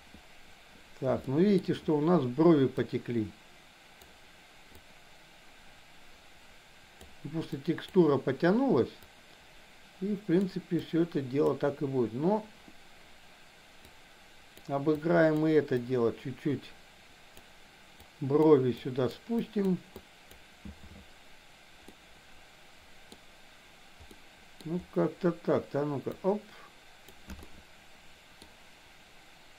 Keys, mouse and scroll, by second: 1.3 shift+middle click, 2.8-4.0 drag, 4.8-7.1 drag, 7.6 click, 9.1-10.4 drag, 10.9 click, 13.9 click, 14.9 click, 15.8-17.3 drag, 18.0 click, 18.8 click, 19.4 click, 20.0 click, 22.0-23.1 middle drag, 24.0 middle click, 26.1-27.1 drag, 27.4-28.5 middle drag.